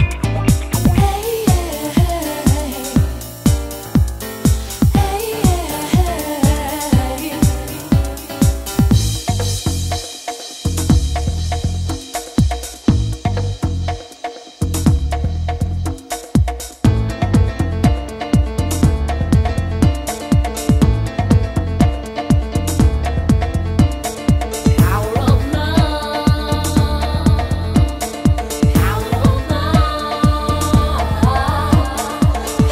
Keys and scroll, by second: 8.6 super+space.